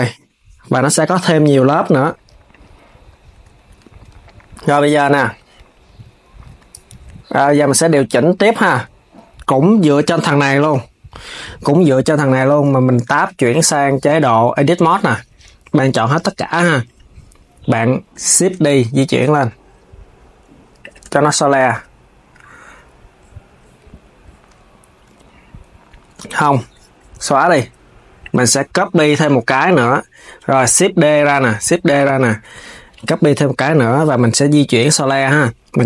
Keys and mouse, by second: 1.0 s, 2.2 click, 3.2 s, 5.6 KP_3, 6.2 Tab, 7.0 Tab, 7.5 s, 9.3 click, 10.4 KP_7, 12.0 Tab, 15.6 KP_3, 18.1 shift+d, 20.7 Tab, 24.9 z, 30.3 shift+d, 33.1 KP_7.